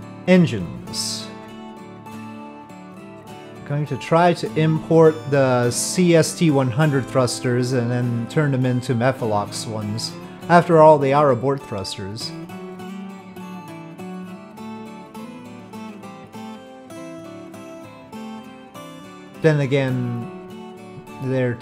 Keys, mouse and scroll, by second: 1.7-4.6 drag, 17.3-18.2 middle drag, 21.2-21.6 middle drag.